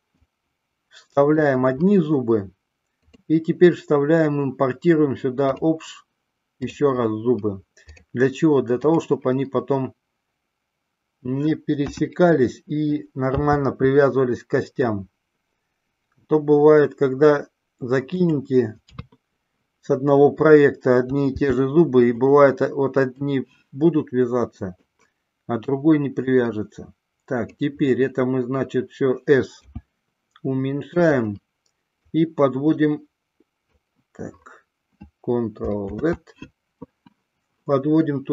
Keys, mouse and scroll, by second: 0.3-1.5 drag, 3.3-5.9 drag, 11.9 KP_1, 13.4 r, 18.4 click, 19.0 KP_3, 21.4 r, 23.1-25.0 drag, 26.3-27.7 drag, 29.7 s, 32.3-33.9 drag, 36.4 ctrl+z.